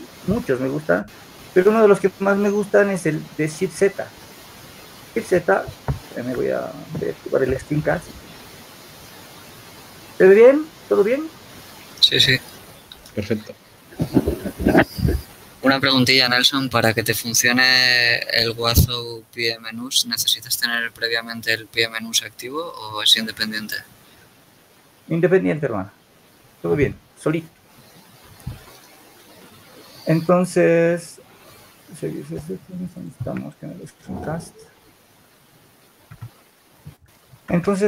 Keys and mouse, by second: 35.8 n, 37.2 Tab.